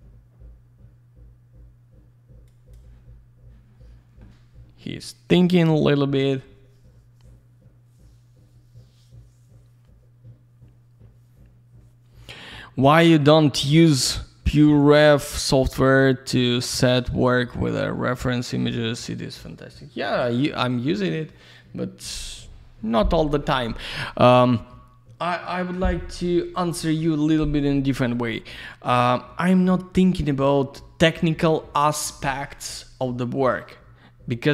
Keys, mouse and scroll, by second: 2.5 click.